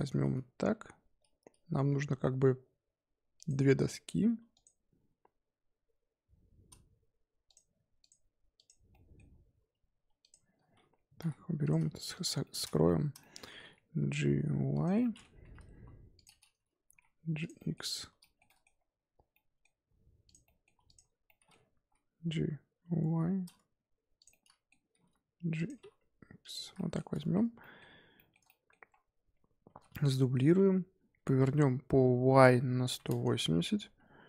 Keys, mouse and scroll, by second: 0.6 g, 3.7 s, 4.7 g, 8.0 click, 8.5 click, 8.9-10.2 middle drag, 10.2 click, 11.2 h, 11.6 click, 12.1 shift+click, 12.4-13.4 shift+middle drag, 13.4-13.9 scroll up 2, 13.9 g, 15.0-15.6 middle drag, 15.6 KP_1, 16.1 click, 16.8 g, 17.5-17.8 middle drag, 17.8 click, 18.2-18.8 shift+middle drag, 18.8-19.3 scroll up 1, 19.3 middle click, 20.2 click, 20.4-20.8 middle drag, 20.8 shift+click, 21.2-21.8 middle drag, 21.8 g, 24.3-24.9 middle drag, 24.9 g, 25.7 g, 26.6 scroll down 4, 26.7-29.6 middle drag, 29.6 shift+d, 31.1 r, 33.7-34.2 scroll up 2.